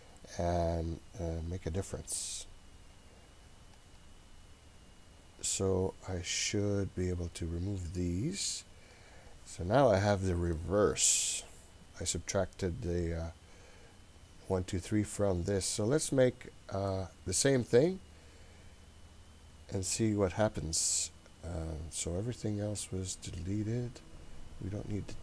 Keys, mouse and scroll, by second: 0.2-1.9 drag, 7.4 click, 8.3 click, 10.5-17.0 middle drag, 18.6 click.